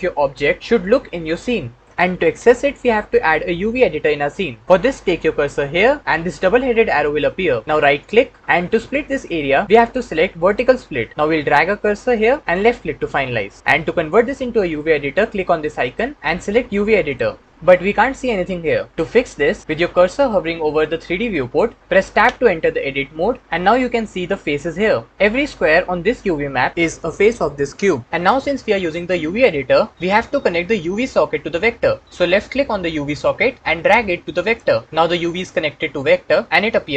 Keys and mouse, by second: 21.8 Tab, 22.1-23.1 middle drag, 22.5 Tab, 32.0 click, 34.8 middle click.